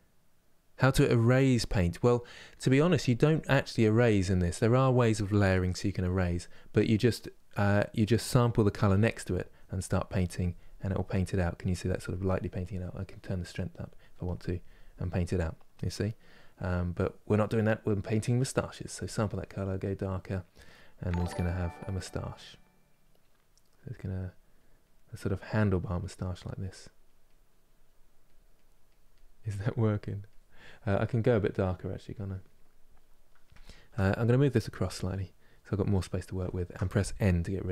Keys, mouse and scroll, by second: 9.2-20.2 drag, 20.2-21.4 middle drag, 21.4-33.3 drag, 33.3-34.5 shift+middle drag, 34.5 click, 35.5-37.7 ctrl+middle drag.